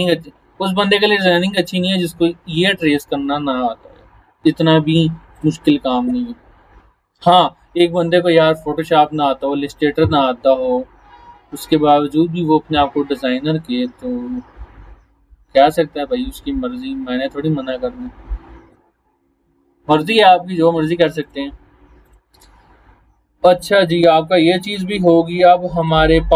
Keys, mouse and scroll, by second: 5.4 click, 6.6 scroll down 1, 18.1 scroll down 1, 21.2 click, 21.3 click, 22.5 scroll up 1, 23.9 scroll up 1, 24.8 click, 25.8 click.